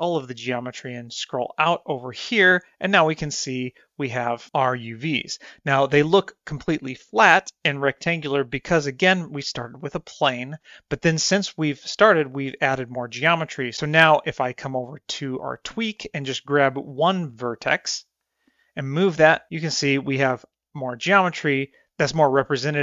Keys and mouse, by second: 3.7-4.5 shift+middle drag, 15.1-15.9 drag, 17.7 click, 17.9-19.9 drag, 20.5-21.2 drag, 22.1-22.8 drag.